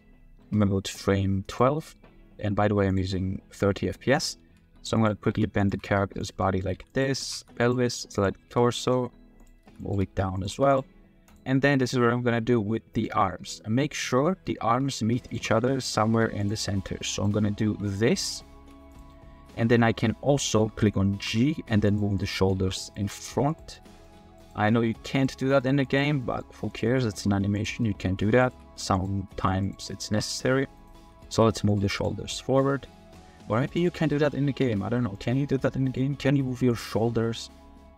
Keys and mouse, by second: 0.3 space, 1.5-3.3 drag, 4.1 click, 4.5-7.4 typing, 6.4 drag, 8.2 drag, 8.5 r, 8.8 click, 9.4 drag, 9.6 r, 9.9 r, 10.1 r, 10.5 r, 11.6-13.0 middle drag, 13.2-13.6 middle drag, 14.7 r, 15.4 r, 15.5 r, 16.0 r, 16.6 drag, 17.1 click, 17.7 r, 18.6 r, 18.8 r, 19.1-19.5 middle drag, 20.4 middle click, 21.3 g, 22.2-22.5 middle drag, 22.6-26.6 typing, 23.7-24.1 middle drag, 25.4 click, 26.2 click, 26.7-27.2 drag, 27.5 click, 27.8 click, 28.2-31.8 typing, 32.4 click, 32.9 shift+drag, 33.7 click, 34.4 g, 34.6 z, 35.6-36.0 drag, 37.8 g.